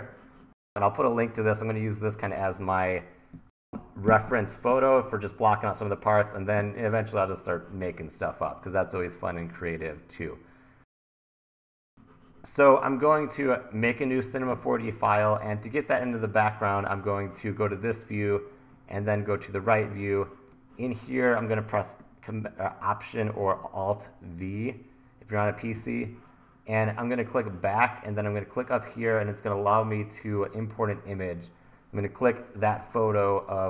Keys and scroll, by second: 11.6 super+Tab, 13.9 super+n, 25.7 alt+v.